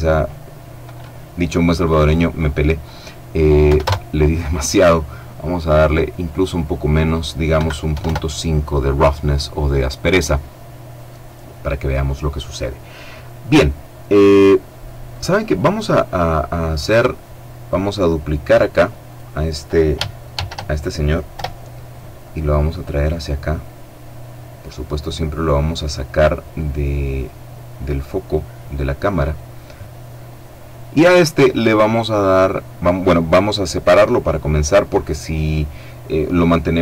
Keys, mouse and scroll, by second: 3.0 KP_1, 3.1 KP_Enter, 5.7 click, 6.9 KP_Decimal, 7.3 KP_5, 7.4 KP_Enter, 14.8 right click, 17.8 right click, 19.6 shift+d, 20.7 Return, 22.1-28.1 drag.